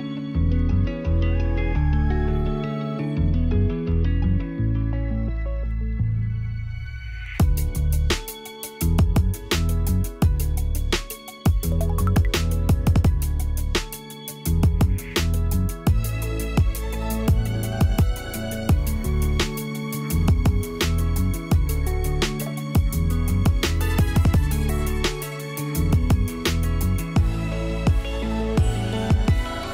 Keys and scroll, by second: 7.3 p, 19.7 e, 26.8-27.9 typing.